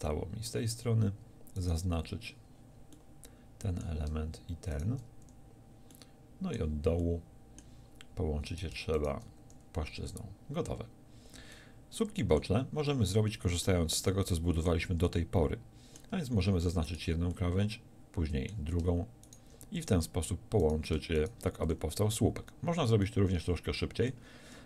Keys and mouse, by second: 0.2-2.3 drag, 5.3 f, 9.4 f, 10.2 a, 16.9-19.8 right drag, 19.8 f, 21.6 f, 22.0 a.